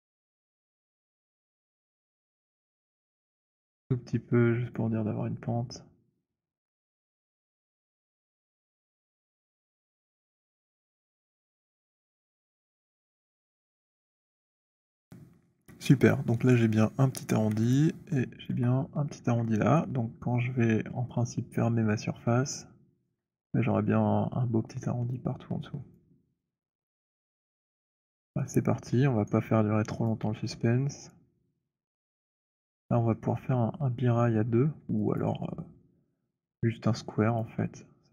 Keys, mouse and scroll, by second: 4.6 click, 11.5 click, 13.8 alt+click, 14.5-15.1 alt+scroll, 18.5 alt+click, 20.8 alt+click, 23.0 alt+click, 26.0 alt+click, 26.7 alt+middle click, 27.1 alt+click, 27.9 alt+click, 29.2 right click, 30.1 click, 32.4 alt+right click, 32.9 alt+middle click, 35.2 alt+click, 37.3 click.